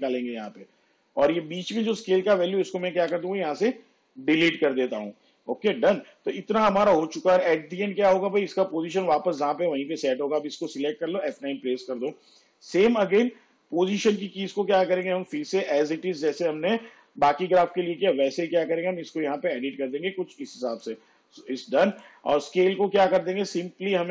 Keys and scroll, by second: 3.1 Delete, 11.3 F9.